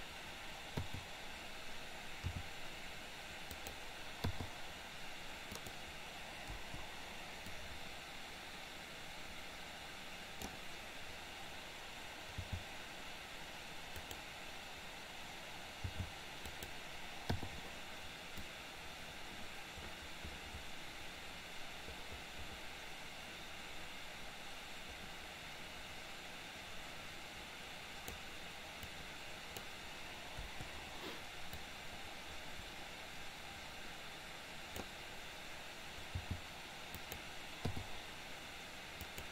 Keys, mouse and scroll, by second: 1.0 i, 2.3 r, 4.2 i, 5.6 click, 6.7 Delete, 7.7 click, 12.6 g, 17.5 i, 18.6-28.3 drag, 28.8 click, 29.1 click, 30.6 Delete, 31.7-35.0 drag, 36.3 g, 37.8 i, 39.0 click.